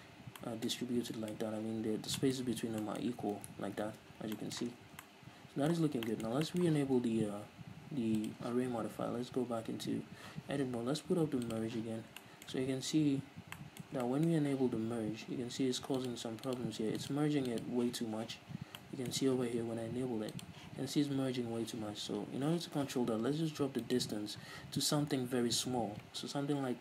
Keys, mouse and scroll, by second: 3.7 ctrl+z, 4.9 scroll down 2, 5.0 Tab, 6.0 scroll down 2, 8.4 click, 8.8 scroll up 2, 9.1 z, 10.2 scroll up 1, 11.7 click, 12.1 scroll up 1, 12.4-16.2 shift+middle drag, 12.9-13.2 scroll down 1, 16.2-18.4 drag, 18.4 z, 18.8 scroll down 1, 19.0-20.5 middle drag, 20.5 click.